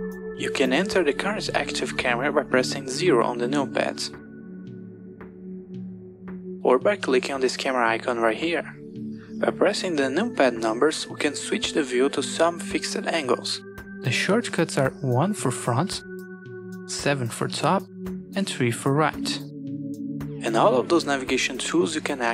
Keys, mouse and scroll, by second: 2.9 KP_0, 5.2 KP_0, 7.7 click, 9.3 click, 15.4 KP_1, 17.0 KP_7, 18.6 KP_3.